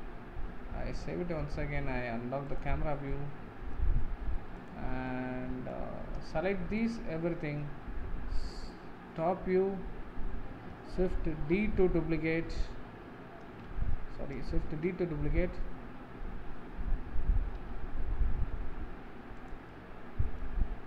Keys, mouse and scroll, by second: 2.5 click, 3.2-4.8 middle drag, 4.8 click, 5.3-7.0 middle drag, 7.0 shift+click, 9.3 KP_7, 19.8 middle click.